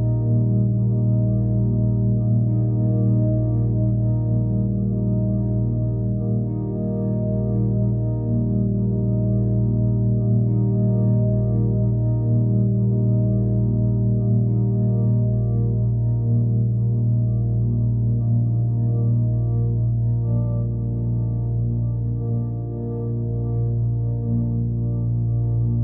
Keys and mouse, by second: 2.5 click, 3.9-10.6 drag, 11.3 middle drag, 11.6-15.4 alt+middle drag, 18.4 alt+middle drag, 20.3 click, 21.6 click, 22.3 click, 23.3 click.